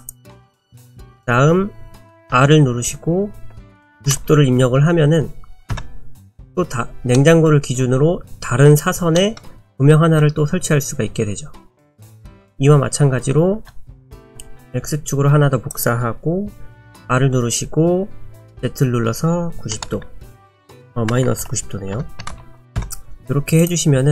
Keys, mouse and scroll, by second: 2.4 r, 7.2 middle click, 9.2 middle click, 13.6 shift+d, 16.8 r, 23.6 click.